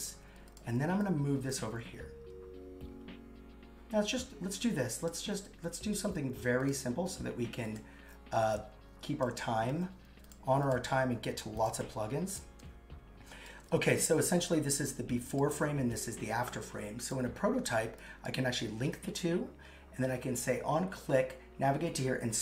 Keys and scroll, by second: 9.7 super+c, 10.8 super+v, 11.8 super+x.